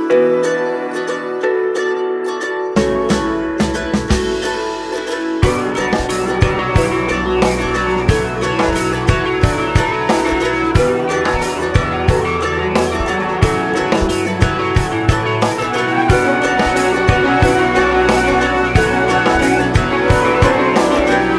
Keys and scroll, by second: 14.2 ctrl+space.